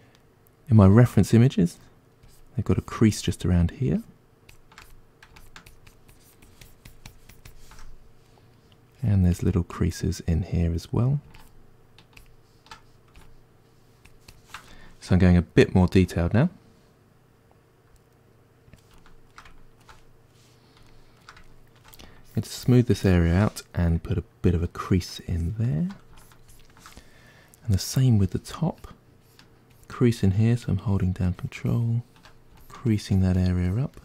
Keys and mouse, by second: 14.8-22.2 ctrl+middle drag, 22.2-34.0 shift+drag.